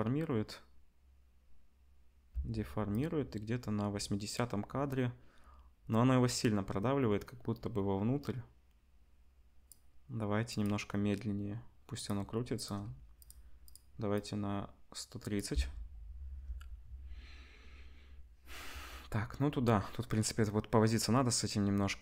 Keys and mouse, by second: 2.3 space, 2.9-10.6 drag, 10.6-11.9 middle drag, 11.9 click, 12.1 middle click, 12.5-13.2 drag, 13.2-13.6 middle drag, 13.6 click, 13.7-14.1 middle drag, 14.1-22.0 drag, 15.5 space.